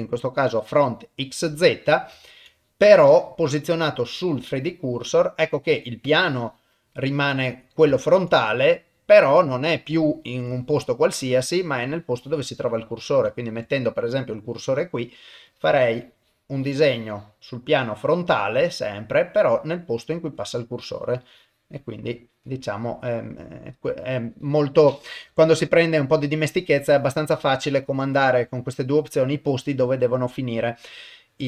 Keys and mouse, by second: 1.1 middle click, 2.2 ctrl+middle click, 2.7 middle click, 4.0 click, 4.9 middle click, 6.1 click, 7.0 middle click, 8.0 ctrl+middle click, 8.3-9.4 middle drag, 10.0 ctrl+middle click, 10.8 middle click, 11.5 shift+middle click, 13.5 shift+right click, 14.1 middle click, 15.5-17.4 drag, 17.6-19.0 middle drag, 19.2 middle click, 19.8 middle click, 21.2-22.5 drag, 22.7 middle click, 27.9-31.4 drag.